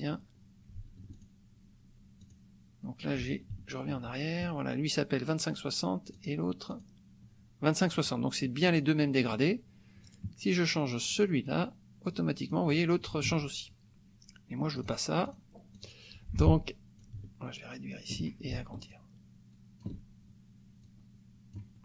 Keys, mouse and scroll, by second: 1.2 ctrl+click, 2.2 click, 3.5 ctrl+z, 6.2 click, 6.8 click, 8.8 click, 10.1 click, 11.2 click, 12.1 click, 13.2 ctrl+z, 14.8 click, 15.3 click, 15.8 click, 17.0-18.3 ctrl+drag, 18.9-20.0 ctrl+shift+drag, 20.8 click.